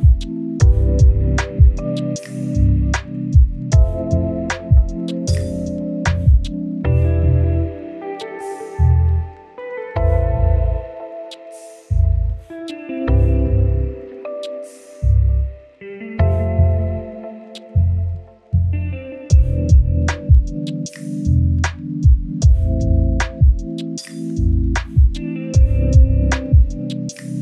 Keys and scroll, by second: 4.5 Delete, 26.1-27.1 typing.